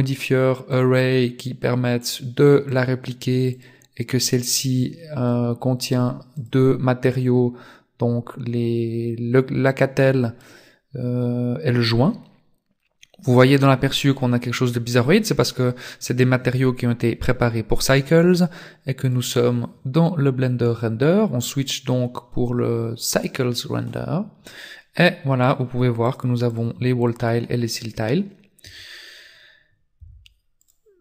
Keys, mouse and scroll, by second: 0.7 click, 2.0 click, 2.7 click, 3.5 click, 4.6 click, 5.9 click, 6.4 click, 19.1 click, 25.5 click, 26.1 click, 26.5 click, 27.0 click, 28.7 Tab, 29.0-29.8 scroll down 3, 29.8-30.2 scroll down 3, 30.6 right click.